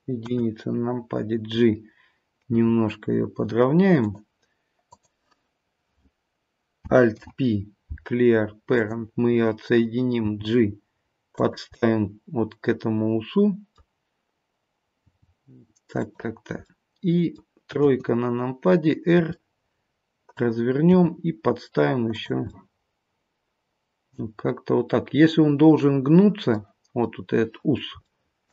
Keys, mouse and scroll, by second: 0.2 KP_1, 2.4 g, 4.9 click, 7.0 alt+p, 11.7 middle click, 16.6 middle click, 17.8 KP_3, 19.2 r, 22.0 g, 22.5 middle click, 26.5-27.0 scroll down 1, 27.0 middle click, 28.0 shift+middle click.